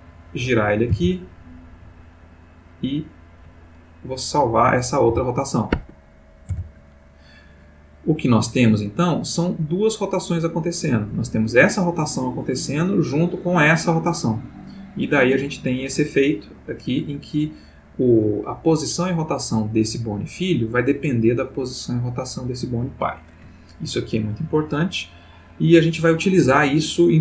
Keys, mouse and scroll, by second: 0.9 r, 1.8 click, 1.9 right click, 4.1 click, 5.1 r, 5.8 Escape, 6.5 i, 7.0 click, 8.1-10.7 drag, 11.2 click, 13.0-18.3 drag.